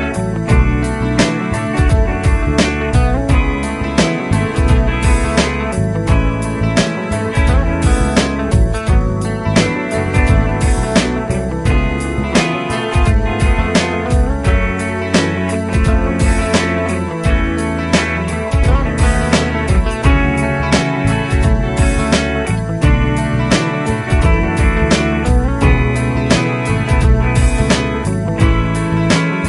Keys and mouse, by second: 2.8 right click, 3.9 shift+click, 4.6 typing, 6.3 F3, 14.7 F3.